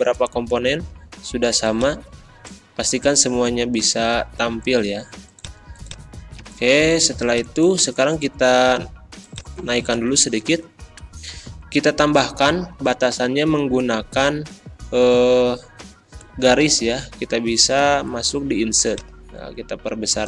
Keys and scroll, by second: 6.4 a, 10.0 Up.